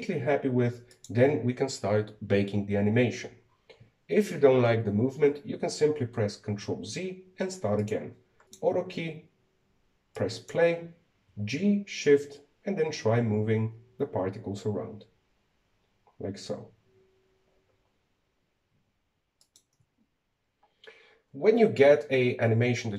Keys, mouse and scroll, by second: 1.7 click, 7.3 ctrl+z, 8.4 click, 9.2 click, 10.9-12.0 drag, 12.0 g.